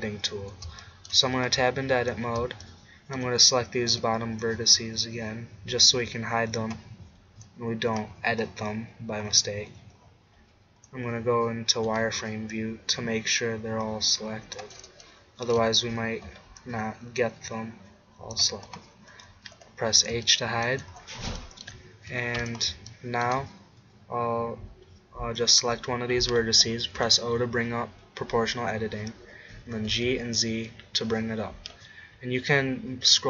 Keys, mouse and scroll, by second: 1.6 Tab, 3.9 b, 8.0 scroll up 1, 10.4 z, 11.9 b, 13.6-15.0 drag, 13.6-15.0 middle drag, 13.6-15.0 right drag, 16.3 b, 18.7 middle click, 19.6 h, 25.4-27.2 drag, 27.0 o, 29.6 g.